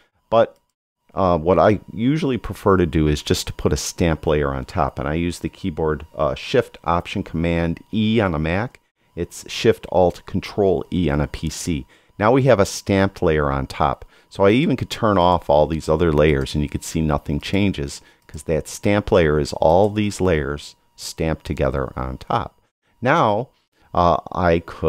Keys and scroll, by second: 8.2 alt+shift+super+e.